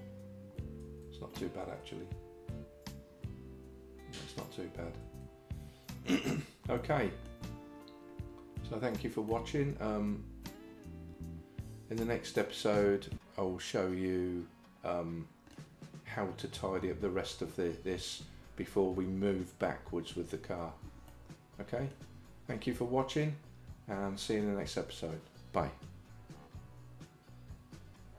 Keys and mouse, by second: 0.9 Tab, 1.7 Tab, 5.1 Tab, 6.8 middle click, 9.3-15.6 middle drag, 21.1 middle click.